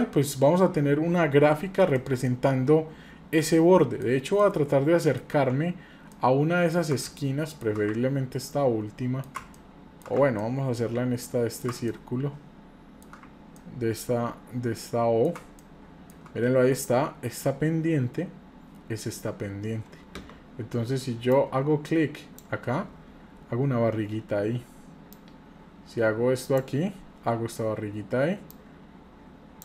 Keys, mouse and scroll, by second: 0.7 scroll down 1, 1.9-4.0 middle drag, 1.9-2.3 scroll down 3, 4.4-5.3 shift+middle drag, 6.1 ctrl+middle click, 7.2-7.6 shift+middle drag, 8.4-9.4 ctrl+middle drag, 9.6 shift+middle click, 10.4-11.6 ctrl+middle drag, 11.9-13.0 shift+middle drag, 13.6-15.4 ctrl+middle drag, 15.6 shift+middle click, 21.3-22.4 drag, 25.1-26.6 drag, 28.5-29.6 drag.